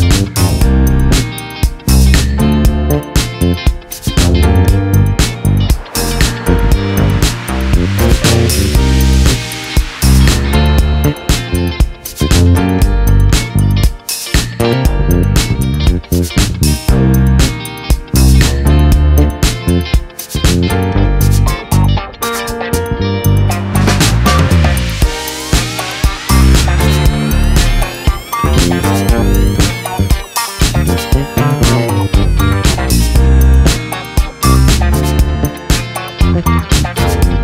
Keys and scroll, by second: 4.0 ctrl+z, 8.5 ctrl+z, 12.5 ctrl+-, 12.9 ctrl+=, 15.3-20.6 typing, 23.0-23.9 typing, 24.5 ctrl+a.